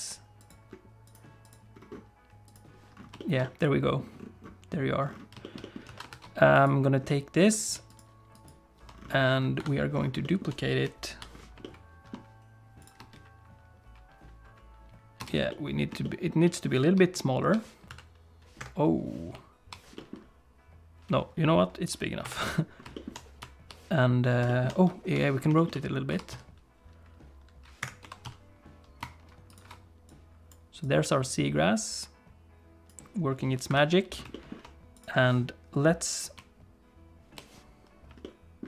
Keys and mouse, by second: 1.1 click, 1.5 click, 2.4 click, 3.2 shift+middle click, 3.4 middle click, 5.4 shift+middle click, 5.6 middle click, 5.9 alt+a, 6.1 ctrl+s, 6.5 click, 7.1 middle click, 7.9 shift+click, 8.3 shift+click, 9.6 KP_7, 10.2 click, 10.8 ., 14.6 space, 16.6-18.6 middle drag, 16.6 space, 18.6 s, 22.2 KP_7, 22.9 shift+middle click, 24.5 shift+middle click, 24.9 ., 25.6 shift+click, 25.7 middle click, 26.1 r, 28.0 r, 30.1 click, 30.9-33.0 drag, 33.7 KP_7, 34.3 middle click, 34.9 middle click, 38.2 shift+middle click.